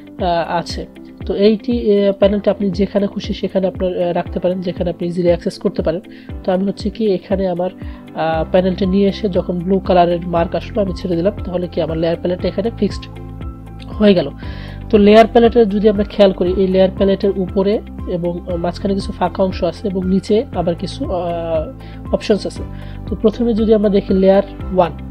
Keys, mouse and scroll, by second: 2.2-6.7 drag, 6.7-13.7 drag.